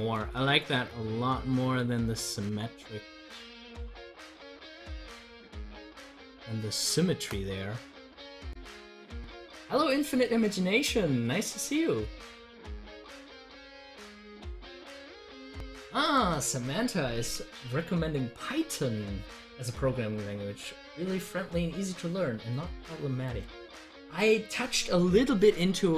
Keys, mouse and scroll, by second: 0.1 ctrl+z, 3.8 ctrl+z, 14.7 click.